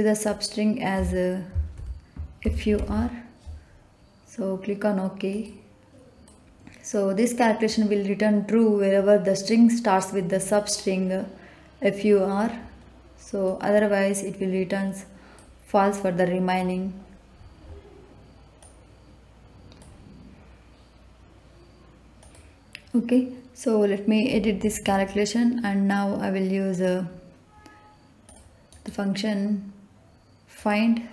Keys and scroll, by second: 0.9 BackSpace, 1.7 shift+f, 2.4 shift+u, 2.7 shift+r.